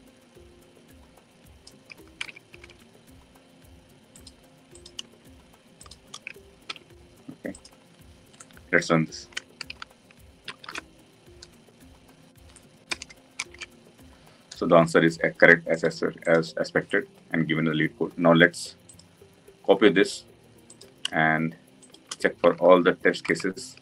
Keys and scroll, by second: 6.6 ctrl+v, 10.4 ctrl+v, 10.5 ctrl+shift+F10, 23.2 ctrl+c.